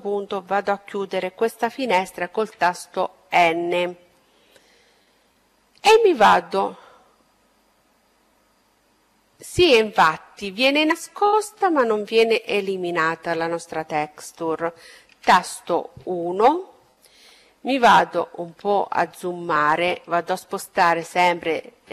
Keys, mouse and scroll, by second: 0.0 n, 2.6-4.5 middle drag, 13.0 KP_1, 15.5-18.6 middle drag, 21.1-21.9 middle drag.